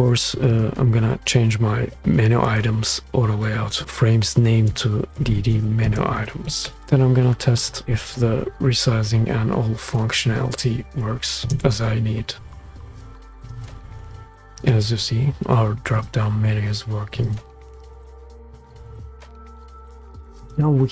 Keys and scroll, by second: 5.1-7.8 typing, 11.4 shift+space.